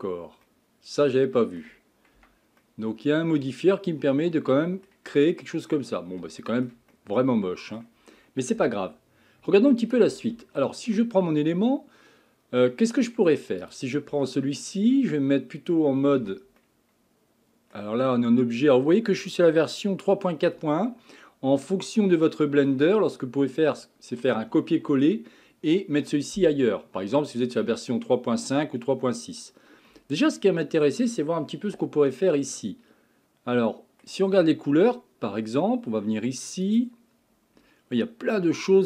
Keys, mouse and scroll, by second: 0.5-2.2 middle drag, 2.2 Tab, 2.6-5.2 middle drag, 5.2 scroll up 5, 5.7 scroll down 4, 6.3-8.6 shift+middle drag, 8.6 z, 10.5-13.0 shift+middle drag, 13.0-13.6 scroll up 1, 13.6 click, 14.1 Tab, 16.2 a, 16.6-19.6 middle drag, 21.6-23.0 middle drag, 23.0-26.2 scroll down 1, 29.9 middle click, 30.5 scroll up 5, 31.8-35.7 shift+middle drag, 36.8 click, 37.6 scroll up 3.